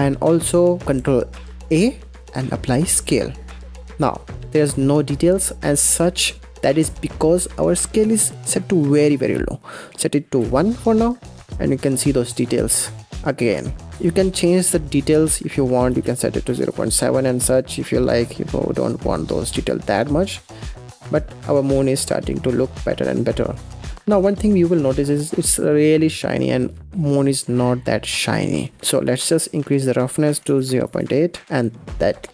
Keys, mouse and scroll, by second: 1.6 ctrl+a, 3.6-6.2 middle drag, 6.9-7.3 scroll up 4, 7.3 middle click, 7.7-8.7 scroll up 8, 8.7-11.3 drag, 11.5-13.8 middle drag, 13.8-16.9 drag, 17.9-23.8 middle drag, 23.9-24.3 scroll up 4, 24.6-24.9 scroll down 1, 24.9-28.0 middle drag, 28.0-28.3 scroll down 2, 28.3-29.6 middle drag, 29.6-31.5 drag, 31.5-32.3 middle drag.